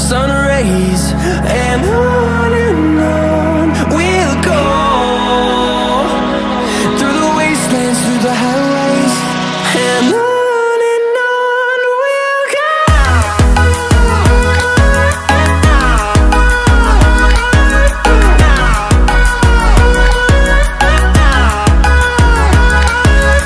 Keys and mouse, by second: 0.8 shift+d, 2.5 r, 2.9 z, 3.9 KP_9, 4.1 KP_0, 4.6 KP_Enter, 6.8-7.9 drag, 11.4 click, 12.5 x, 12.9 x, 13.2 click, 21.1 middle click.